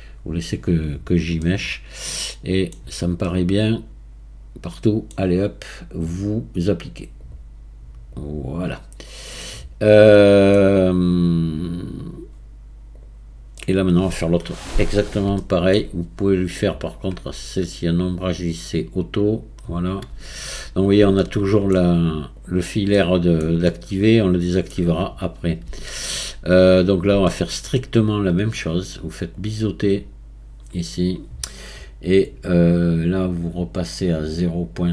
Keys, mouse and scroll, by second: 0.8-1.4 scroll down 4, 1.4-2.8 middle drag, 2.8-3.2 scroll down 4, 3.2-6.2 middle drag, 7.2-8.9 drag, 8.9 scroll down 4, 9.4-12.5 middle drag, 13.6-14.2 middle drag, 14.2 scroll down 4, 15.4-16.5 shift+middle drag, 16.5 click, 17.7-19.9 right drag, 19.9-21.2 scroll up 2, 21.2-22.4 shift+middle drag, 22.4 click, 22.9-25.3 middle drag, 25.3 scroll up 2, 25.9-26.6 shift+middle drag, 26.6-26.9 scroll up 4, 27.3-29.4 shift+middle drag, 29.4-33.0 drag, 33.2-34.9 drag.